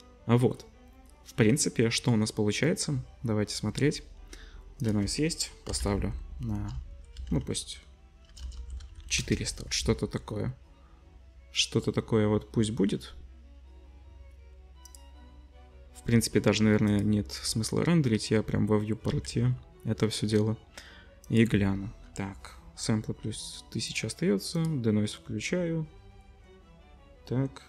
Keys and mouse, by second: 5.9-9.0 typing, 11.6 0, 15.1-16.9 middle drag, 16.9 click, 17.0-21.2 middle drag, 19.3 ctrl+s, 21.2-24.0 drag, 24.0 middle click, 24.5 click.